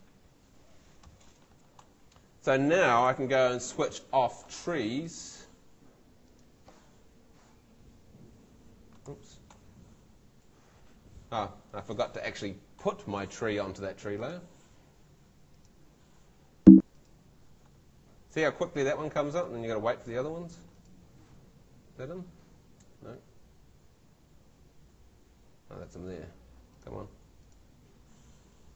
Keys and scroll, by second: 3.2 super+l, 9.1 super+l, 16.6 ↺, 19.9 Escape, 22.9 Tab.